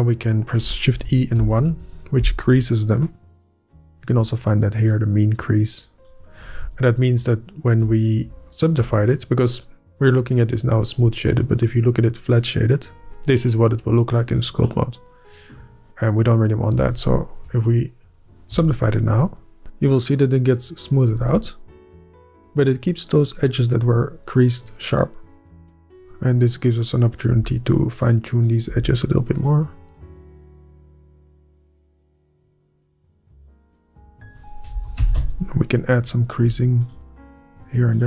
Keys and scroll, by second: 0.8 shift+Up, 1.4 Up, 1.7 Return, 2.2 Return, 3.3 Up, 3.9 Up, 7.2 Up, 8.1 Up, 9.1 Up, 17.6 ctrl+Up, 18.5 ctrl+Up, 19.1 Up, 21.2 alt+a, 21.7 Up, 27.2 Up, 27.8 Up, 28.6 Up, 29.2 Up, 30.2 Up, 30.7 Up, 31.2 Up, 31.8 Up, 32.5 é, 32.7 ctrl+Up, 32.9 ctrl+w, 33.0 ctrl+x, 34.0 shift+Up, 34.7 shift+Up, 35.0 1, 35.2 Return, 35.7 Up, 36.5 Up, 37.0 Up.